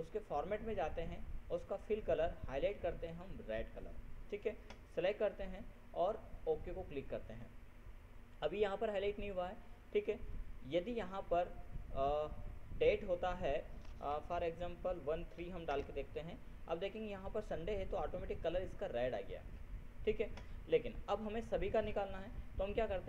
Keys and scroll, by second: 14.8 ctrl+BackSpace, 15.7 ctrl+3, 16.3 ctrl+Return.